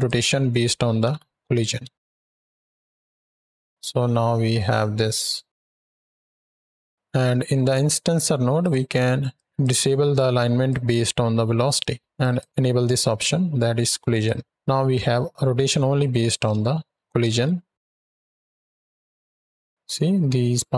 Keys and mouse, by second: 0.8 shift+Right, 0.9 shift+Left, 1.7 space, 6.2 space, 8.4 drag, 9.2 drag, 10.5-11.6 drag, 12.1 click, 13.9 click, 15.2 shift+Right, 15.3 shift+Left, 17.2 ctrl+space, 17.8 space.